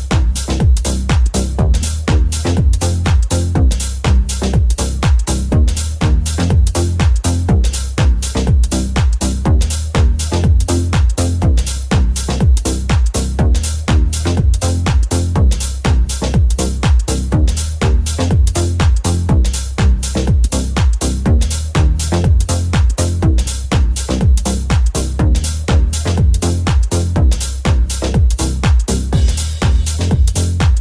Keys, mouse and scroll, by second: 0.4 Tab, 0.6-1.6 middle drag, 3.2-9.5 ctrl+shift+middle drag, 9.5 click, 9.5 shift+middle click, 9.9 shift+click, 10.0-13.5 shift+middle drag, 13.5 right click, 13.5-14.7 middle drag, 14.2 g, 15.3-30.8 shift+middle drag, 15.3 shift+g, 21.6 right click, 23.2 shift+c.